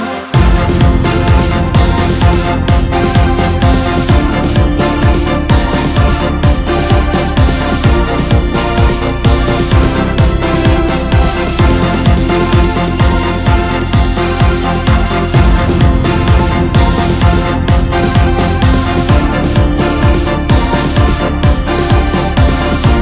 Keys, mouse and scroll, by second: 3.8 shift+click, 6.9 s, 11.5 scroll down 1, 11.6 scroll up 1, 12.6-13.1 scroll down 3, 13.1-15.2 middle drag, 15.2-16.2 drag, 16.2-16.8 scroll down 3, 16.8-17.3 scroll up 3, 17.3-19.1 middle drag, 19.1-20.4 drag, 20.4 middle click, 21.1 click, 22.6 click.